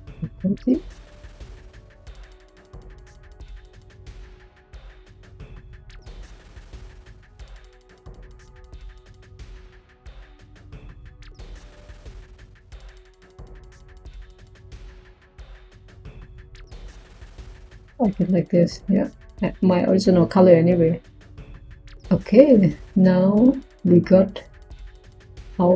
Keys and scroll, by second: 11.5-12.3 typing.